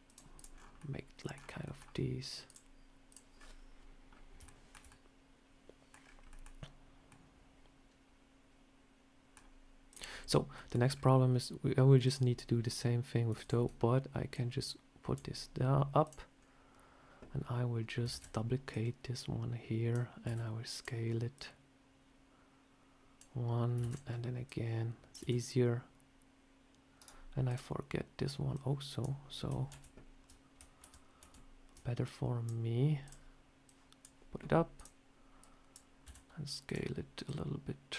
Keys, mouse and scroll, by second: 0.3 click, 0.4 scroll down 3, 0.7 middle click, 1.2 scroll down 2, 1.5 middle click, 2.3 click, 3.2 scroll up 3, 4.0 scroll up 2, 4.3 shift+middle click, 4.6 shift+scroll down 1, 4.8 middle click, 5.9 scroll down 3, 6.2 middle click, 7.0 middle click, 7.0 shift+middle click, 9.3 scroll down 1, 9.8 click, 10.0 scroll up 4, 10.4 middle click, 10.7 scroll down 4, 11.9 click, 13.3 shift+click, 14.2 click, 15.9 click, 16.0 shift+click, 16.3 scroll up 2, 18.0 shift+d, 18.6 click, 20.1 s, 21.2 click, 23.7 shift+d, 24.3 click, 25.1 s, 27.4 click, 28.4 click, 29.7 ctrl+z, 30.8 ctrl+z, 31.2 ctrl+z, 31.9 click, 32.9 click, 33.5 click, 34.6 click, 35.3 click, 35.9 s, 37.2 click.